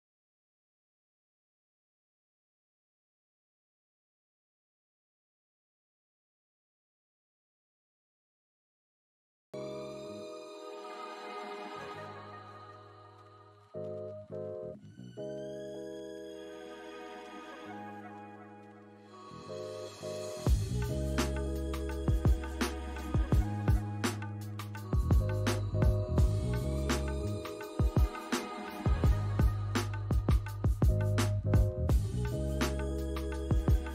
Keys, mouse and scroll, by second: 0.3 double click, 0.8 alt+click, 1.3 scroll down 1, 2.0 alt+middle click, 2.9 alt+scroll up 1, 3.3 alt+click, 4.0 alt+scroll up 1, 4.9 alt+click, 7.7 ctrl+click, 9.8 ctrl+click, 12.7 double click, 13.1 scroll down 1, 13.4 alt+click, 14.5 alt+click, 15.4 scroll up 1, 16.8-17.6 typing, 16.9 scroll down 1, 17.2 alt+middle click, 17.6 alt+click, 18.8 scroll down 1, 19.8 alt+click, 21.9 scroll down 1, 22.5 alt+click, 24.4-26.1 typing, 25.4 scroll up 1, 25.7 alt+click, 26.4 alt+middle click, 26.7 alt+scroll up 1, 27.2 alt+middle click, 27.5 alt+click, 30.1 alt+click, 30.5 scroll down 1, 30.9 alt+middle click, 31.4 scroll up 1, 33.6 alt+click.